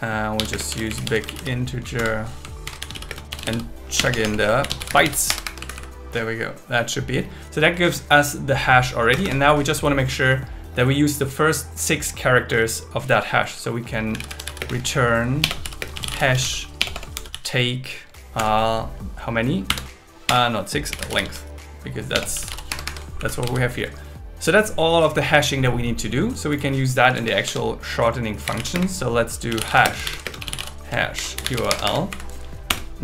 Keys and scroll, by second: 0.5 space, 0.7 shift+b, 2.0 Return, 2.6 shift+8, 3.1 space, 4.0 BackSpace, 5.3 Escape, 5.6 Right, 9.1 Return, 14.6-17.3 typing, 18.4 Return, 20.3 BackSpace, 22.1 BackSpace, 22.7 Escape, 23.2 Right, 23.5 super+s, 27.1 Tab, 28.7 space, 30.0 shift+0, 30.2 space, 31.1 shift+8, 31.7 Escape, 32.1 Right, 32.7 Return.